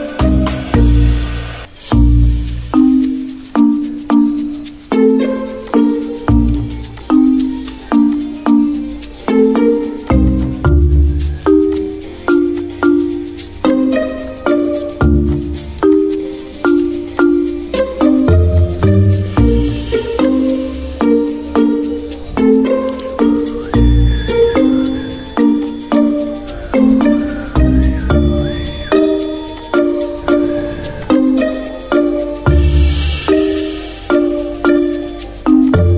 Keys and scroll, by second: 7.9 x, 21.7 v.